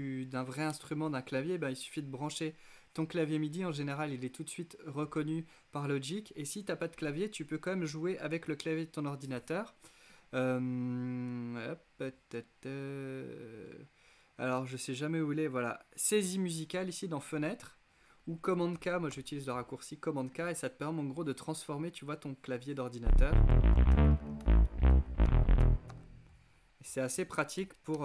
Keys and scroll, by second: 18.3 super+k, 22.8-28.0 typing.